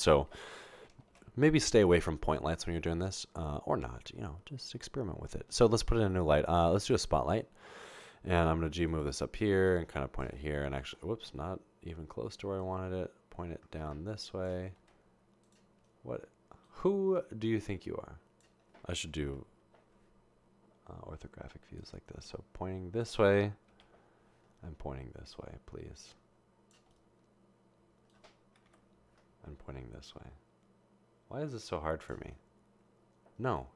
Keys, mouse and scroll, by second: 1.1 a, 8.5 g, 15.5 g, 19.3 1, 22.8 1, 23.8 3, 28.7 7.